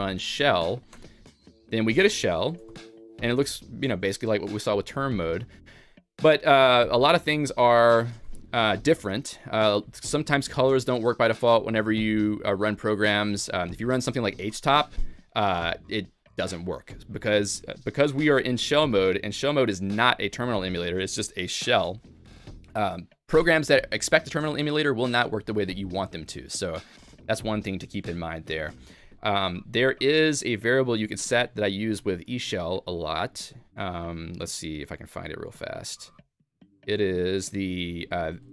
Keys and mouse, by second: 1.0 Return.